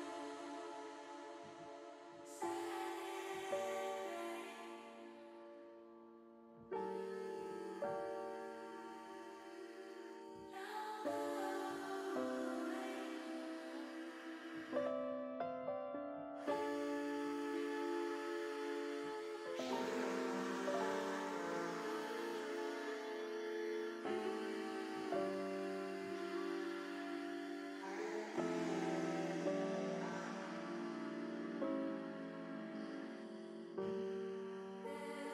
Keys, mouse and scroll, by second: 3.9 click, 8.6 click, 9.9 click, 12.7 click, 18.4 click, 19.1-22.2 drag, 24.5 x, 26.4 ctrl+z, 27.1 x, 30.7-32.0 drag, 34.7 click.